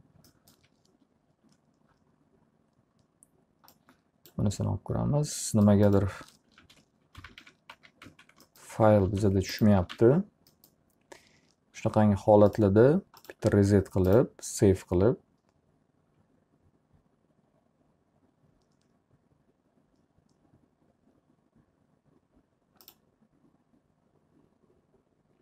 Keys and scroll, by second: 6.1 ctrl+z, 6.7 ctrl+z, 6.9-8.6 typing, 9.1 alt+r, 9.6-10.5 typing.